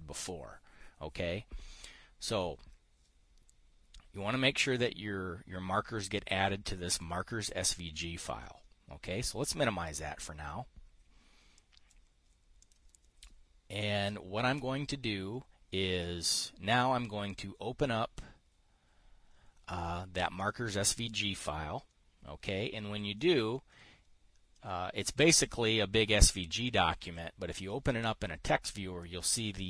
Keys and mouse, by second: 7.4 click, 12.0 click, 13.1 click, 20.9 click, 24.0-27.7 drag, 29.5-29.6 drag.